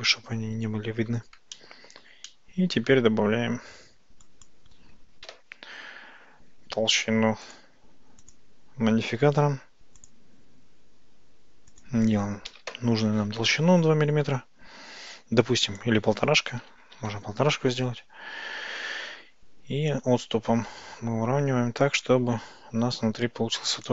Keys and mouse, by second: 1.6-2.1 shift+middle drag, 2.3 middle click, 3.9 Tab, 4.4 click, 5.3 KP_Decimal, 7.5 click, 8.2-10.2 drag, 11.8-13.5 drag, 15.8-17.9 drag, 20.1-23.9 drag.